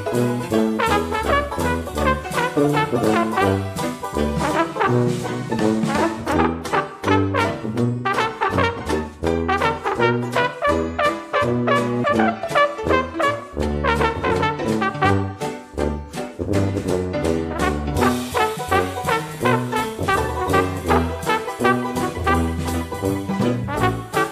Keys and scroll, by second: 7.3 ctrl+d, 15.0 ctrl+d.